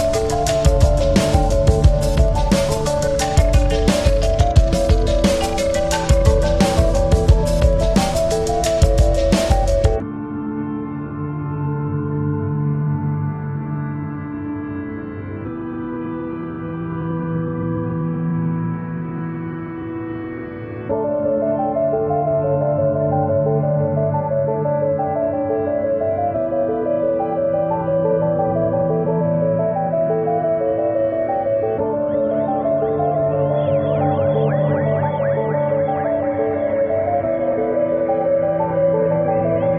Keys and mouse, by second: 0.9 click, 1.3 ctrl+=, 2.0 space, 2.3 click, 2.5 space, 4.2 click, 5.5-7.8 drag, 8.6-10.2 drag, 11.1 space, 11.4 click, 11.7 space, 14.1 right click, 15.0 click, 15.7-18.3 shift+drag, 18.3-21.9 drag, 22.0 shift+click, 24.8 click, 27.4 click, 27.5 click, 27.8 space, 27.9 click, 28.1 click, 28.3 space, 30.0-35.7 drag, 38.1 click, 39.2 click.